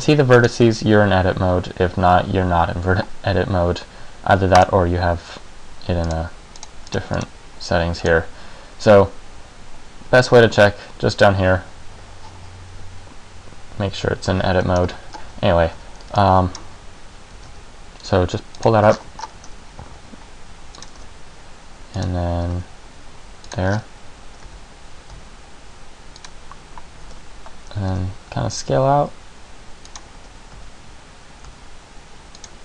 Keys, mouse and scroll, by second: 0.5 right click, 4.7 click, 6.2 click, 6.7 click, 7.1 click, 7.3 click, 9.1 click, 14.9-15.3 scroll down 1, 15.3 scroll up 1, 15.4 a, 15.9 a, 16.2 b, 17.5 g, 18.8 click, 19.1-19.5 shift+scroll up 10, 19.9 e, 21.0 click, 21.1 s, 22.2 click, 22.6 g, 23.7 click, 23.8 scroll up 5, 25.0 e, 27.1 click, 27.2 e, 30.3 e.